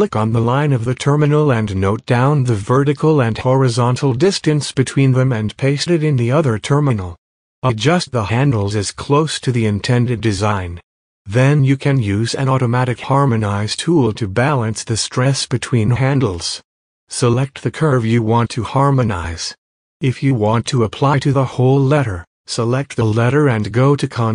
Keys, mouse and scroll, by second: 0.3 click, 0.5 space, 2.0 click, 3.6 click, 4.9-5.8 typing, 6.3 click, 7.1 click, 8.5 click, 9.9-10.8 typing, 10.6-11.2 scroll, 11.2 click, 11.8-12.6 typing, 13.0 click, 14.6 click, 14.7 space, 15.5 space, 16.0 space, 16.5 click, 17.6-19.6 drag, 22.6 click, 23.1 click, 23.3 space, 23.4 click, 23.6 space.